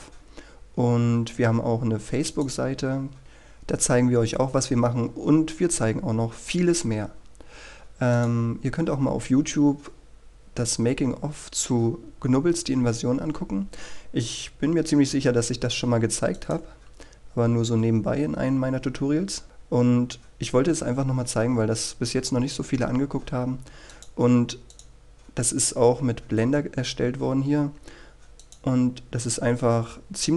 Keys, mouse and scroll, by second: 0.7-3.2 scroll up 1, 3.2-7.4 scroll down 1, 7.4 scroll up 1, 9.3 click, 11.2-12.4 scroll down 1, 12.4-16.0 scroll up 1, 17.5-20.8 drag, 22.5-24.2 scroll down 1, 24.2-25.0 scroll up 1, 25.0-30.3 drag.